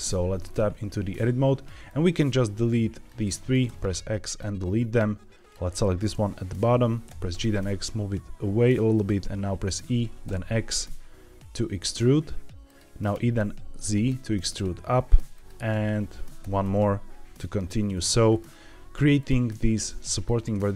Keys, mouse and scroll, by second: 1.8-3.0 drag, 3.6 x, 4.9 click, 7.0 g, 7.2 x, 8.8 click, 9.6 e, 10.2 x, 12.6 click, 13.1 e, 13.3 z, 15.2 click, 15.8 scroll down 1, 16.4 e, 16.5 z, 17.8 click, 18.2-19.1 scroll up 3, 19.1 click, 20.0 click, 20.6 click.